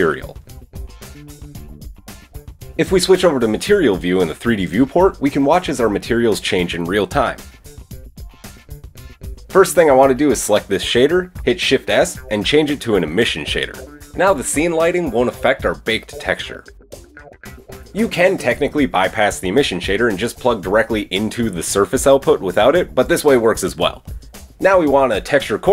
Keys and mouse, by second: 0.8-5.2 drag, 6.7 click, 10.4 click, 11.3 shift+s, 15.3 middle click, 15.9-25.7 drag, 16.8-17.6 typing, 24.6 shift+a.